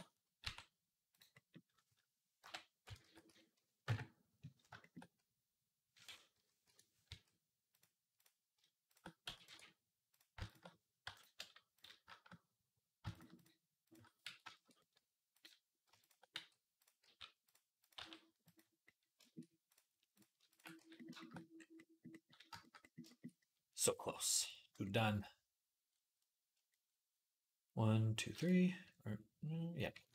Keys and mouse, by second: 0.2 e, 2.2 ., 2.8 s, 6.9 s, 8.7 shift+click, 8.8-9.9 middle drag, 9.0 x, 9.9 click, 10.0-11.5 shift+middle drag, 10.8 m, 11.5 click, 11.6-12.9 middle drag, 12.9 click, 13.0 middle click, 13.1 click, 13.2-15.1 middle drag, 14.1 f, 15.1 click, 15.2 middle click, 15.8 click, 15.9-30.1 middle drag, 16.2 f, 16.8 g, 17.8 g, 19.9 click, 19.9 right click, 20.3 ctrl+click, 20.3 ctrl+right click, 20.6 f, 29.9 ctrl+r.